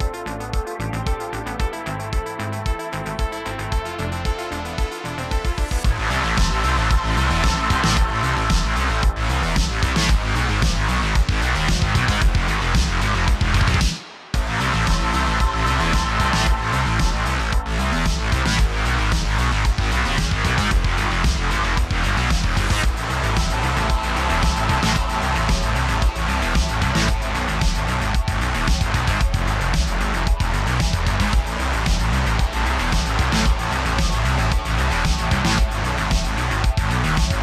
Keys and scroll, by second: 0.0-1.5 typing, 2.9 shift+f, 4.0-5.9 typing, 4.7 super+z, 7.0 space, 7.1 space, 9.0-10.0 typing, 11.3 super+s, 12.5-16.0 typing, 15.9 super+z, 18.1 space, 18.3 space, 20.3 shift+d, 20.4 shift+d, 23.0-31.3 typing, 34.3-37.0 typing, 34.9 super+z, 35.0 super+z.